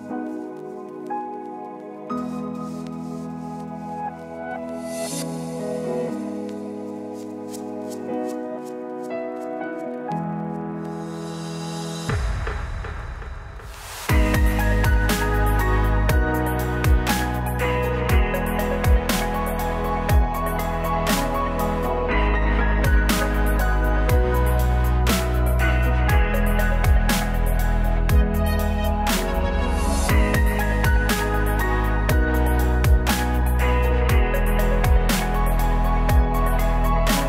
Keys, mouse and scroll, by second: 0.0 ctrl+r, 0.7 ctrl+z, 0.7 right click, 1.5 click, 1.8 right click, 5.8 c, 6.4 x, 7.1 ctrl+z, 7.4 x, 8.0 right click, 8.7 right click, 9.1 e, 10.9 f, 11.9 j, 12.7 click, 14.0 click, 15.0 j, 15.5 j, 15.7 j, 17.6-19.8 typing, 20.5 ctrl+z, 20.6 ctrl+z, 21.0 ctrl+z, 21.4-22.5 drag, 21.7 f, 22.5 ctrl+z, 22.6 ctrl+z, 23.3 click, 23.9 x, 24.6 f, 25.1 click, 25.5 right click, 25.7 middle click, 26.3 j, 27.0 j, 27.6 j, 28.3 j, 34.1 click, 34.2 right click, 35.2-36.2 drag, 36.5 i, 37.2 click.